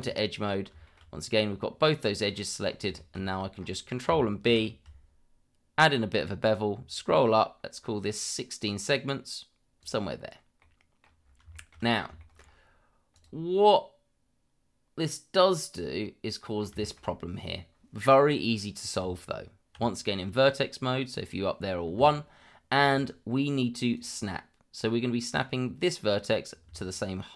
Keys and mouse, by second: 0.8 shift+middle drag, 2.9 shift+middle click, 4.4 ctrl+b, 10.6-11.0 middle drag, 11.5 shift+middle drag, 12.2 shift+middle drag, 13.1 click, 13.6-16.6 middle drag, 16.8 shift+middle drag, 19.0 Tab, 24.0 click.